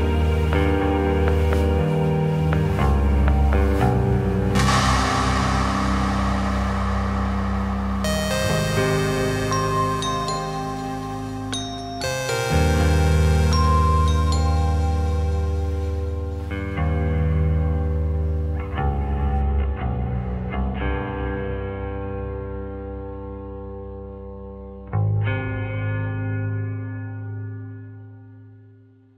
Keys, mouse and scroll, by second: 0.5 click, 1.9 alt+d, 6.8 ctrl+z, 7.1-8.0 middle drag, 8.5 click, 8.9 ctrl+drag, 9.4 shift+drag, 9.6 shift+click, 11.2 Tab, 12.3 a, 14.2 `, 16.8 g, 19.8 click, 21.2 Tab, 21.4 drag, 21.6-25.2 middle drag, 25.2 `, 28.4 alt+d.